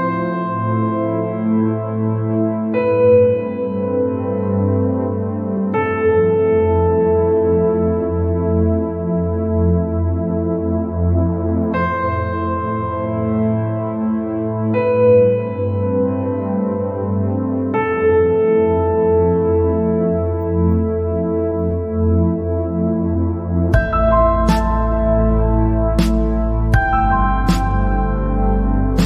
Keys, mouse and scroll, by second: 0.4 click, 0.8 scroll down 1, 0.9 middle click, 1.6 scroll up 3, 2.4 middle click, 3.1 scroll up 2, 3.8 scroll up 2, 4.4-4.8 scroll down 2, 5.3 scroll down 2, 5.4-6.6 middle drag, 6.6 scroll up 2, 7.3-8.6 middle drag, 8.6 alt+click, 10.6 e, 15.3-15.8 scroll down 5, 15.8 middle click, 16.4-16.7 scroll up 3, 16.7 scroll down 1, 16.9-18.5 middle drag, 18.5 ctrl+z, 19.3 click, 19.7 scroll down 3, 20.2 scroll up 3, 20.6 scroll down 1, 20.8 middle click, 21.4 scroll up 1, 21.6 scroll down 1, 21.7 middle click, 22.7-23.0 scroll up 1, 23.0 scroll down 1, 23.1-24.4 middle drag, 24.4-26.1 drag, 26.4 scroll down 1, 26.5 middle click, 27.3 scroll up 3, 27.9-29.0 middle drag.